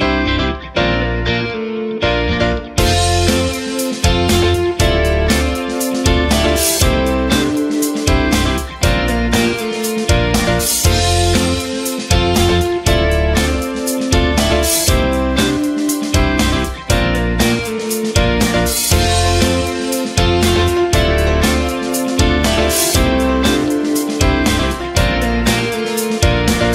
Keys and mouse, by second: 0.4 right click, 0.7 c, 1.9 right click, 2.6 right click, 3.3 g, 5.0 c, 6.4 s, 7.6 s, 9.8 right click, 10.0 c, 11.2 s, 13.1 Tab, 14.1 alt+z, 14.9 Tab, 15.7 c, 16.6 g, 18.4 right click, 18.7 g, 20.0 c, 21.3 g, 22.9 ctrl+z, 23.7 c, 24.4 g, 25.8 right click, 26.2 c.